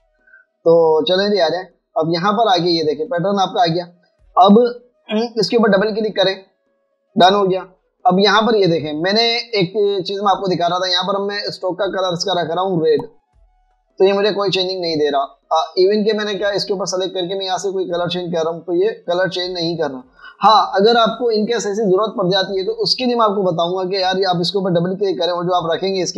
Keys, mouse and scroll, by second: 0.8 double click, 2.5 double click, 7.6 double click, 10.7 Escape, 12.1 double click, 19.3 double click, 25.7 double click.